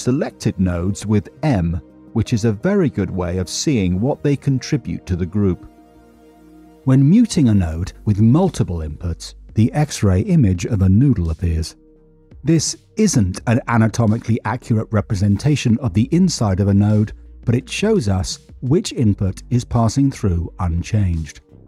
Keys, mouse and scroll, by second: 0.2 middle click, 2.1 m, 3.4 click, 4.0 m, 6.9 m, 9.0 click, 10.1 m.